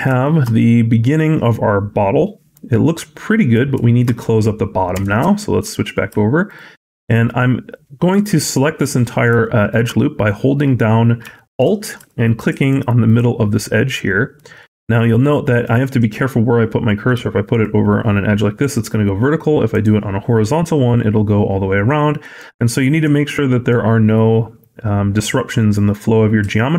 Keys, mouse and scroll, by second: 0.1 middle click, 0.4 middle click, 3.6 shift+middle click, 4.0-4.8 scroll up 2, 4.8 Tab, 5.2 shift+middle click, 6.3 alt+click, 7.4 scroll up 1, 7.7 middle click, 8.7 middle click, 9.2 shift+middle click, 10.1 middle click, 10.7-11.1 scroll up 1, 11.2 shift+middle click, 12.1 alt+click, 12.9 alt+click, 13.6 alt+click, 15.0 scroll down 2, 15.3 middle click, 15.6-16.2 scroll up 1, 17.3 alt+click, 19.5 alt+click, 22.2 alt+click, 23.2 middle click.